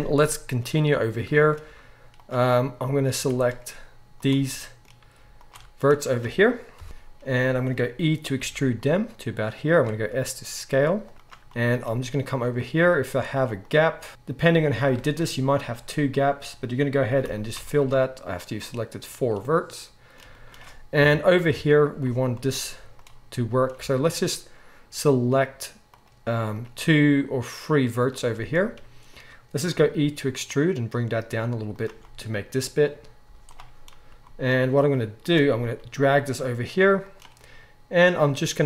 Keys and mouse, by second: 1.6 z, 3.1 z, 4.1 click, 4.2-5.4 shift+middle drag, 5.4 ctrl+shift+click, 5.6-13.6 middle drag, 6.7 KP_1, 8.4 e, 10.0 s, 11.1 g, 13.6 shift+click, 13.7 shift+middle click, 14.1 click, 15.1 shift+middle click, 15.3 z, 15.6-26.0 drag, 17.2 f, 17.5 z, 20.9 KP_3, 21.4 KP_1, 22.7 z, 23.8 alt+a, 26.0-34.3 middle drag, 29.7 e, 33.2 z, 35.2 click, 35.7 g.